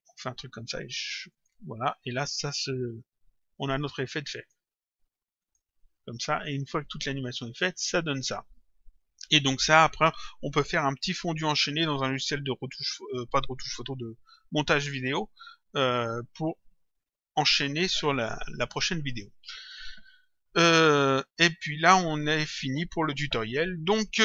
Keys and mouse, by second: 1.3 click, 4.4 click.